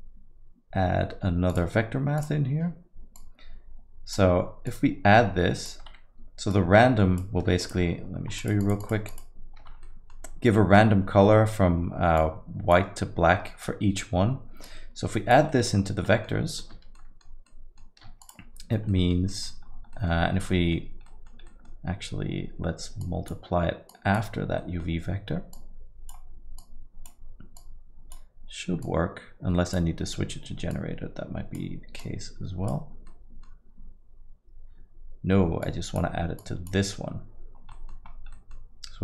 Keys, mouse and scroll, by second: 3.5 click, 4.7 click, 6.6 click, 7.9 ctrl+shift+click, 8.0 ctrl+shift+click, 8.4 click, 8.8 ctrl+shift+click, 9.6 ctrl+shift+click, 9.8 middle click, 12.2 click, 14.6 click, 15.5 middle click, 15.7-16.4 scroll down 6, 16.0 middle click, 16.9 ctrl+shift+middle click, 17.4 middle click, 18.5 ctrl+shift+click, 18.9 middle click, 19.3 middle click, 19.5 ctrl+shift+middle click, 19.7-20.7 scroll up 5, 19.9 middle click, 20.5 middle click, 21.0 middle click, 22.3 middle click, 23.1 click, 24.0 click, 24.6 middle click, 24.9 scroll down 1, 25.6 click, 26.7 click, 27.6 click, 30.8 click, 32.0 click, 33.1 middle click, 35.7 click, 36.4 click, 37.7 middle click, 38.1 scroll down 3, 38.3 middle click, 38.7 scroll down 2.